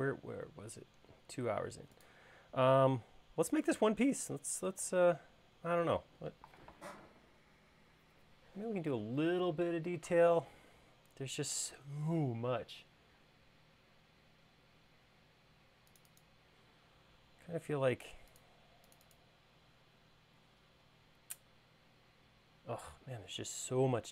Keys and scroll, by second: 20.9 |.